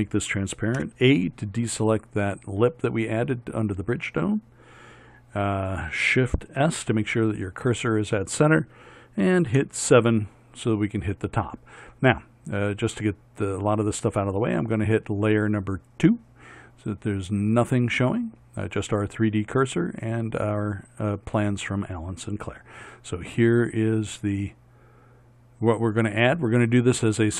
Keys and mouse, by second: 0.8 a, 6.6 shift+s, 9.6 KP_7, 11.0 middle click, 12.1 middle click, 14.2-18.1 middle drag.